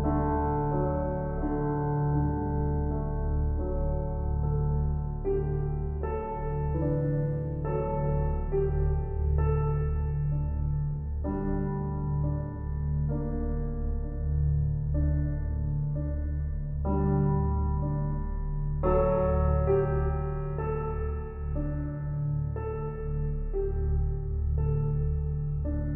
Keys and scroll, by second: 20.4 ctrl+z, 20.8 ctrl+z, 21.5 ctrl+z, 21.9 ctrl+z.